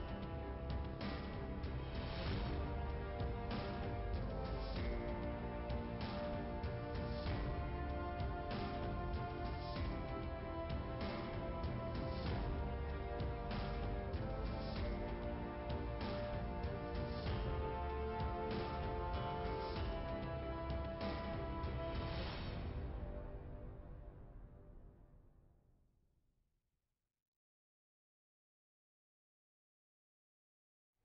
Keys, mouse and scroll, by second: 0.5 click, 0.7 click, 2.3 click, 2.6 click, 4.3 click, 6.5 click, 8.2 click, 9.4 Delete, 12.5 click, 14.2 click, 17.2 click, 18.4 click, 19.1 click, 19.8 click, 19.9 click, 20.1 click, 20.9 click, 22.1 click, 23.3 click, 24.5 Delete, 25.4 click, 26.4 click, 27.5 click, 28.3 click, 29.2 click.